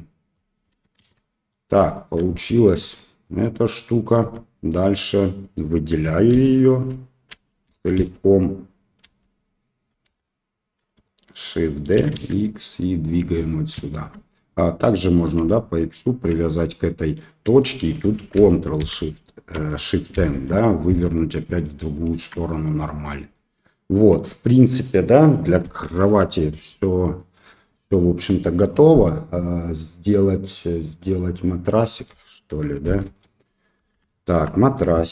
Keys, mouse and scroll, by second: 1.0 shift+z, 1.2 middle click, 1.9 shift+middle click, 2.8 Tab, 3.2-3.8 middle drag, 4.2 Tab, 6.3 l, 7.3 ;, 7.6 ;, 7.9 ;, 9.0 l, 10.0 KP_7, 11.0 shift+click, 11.9 shift+d, 13.8 shift+middle click, 15.1-16.2 ctrl+drag, 17.1 middle click, 18.8 ctrl+shift+n, 20.1 shift+n, 21.5 middle click, 22.0 shift+middle click, 22.4 middle click, 22.8 Tab, 23.3-24.1 middle drag, 24.8-25.2 middle drag, 25.9 KP_1, 27.1-27.5 middle drag, 32.0-32.5 middle drag, 33.0 KP_7, 34.1 shift+middle drag.